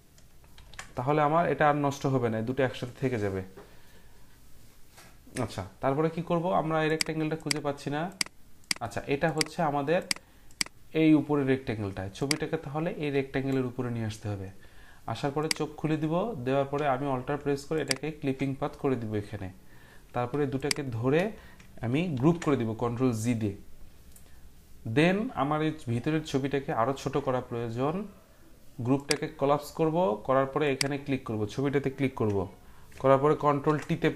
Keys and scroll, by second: 0.5 ctrl+g, 22.1 ctrl+g, 33.4 ctrl+t.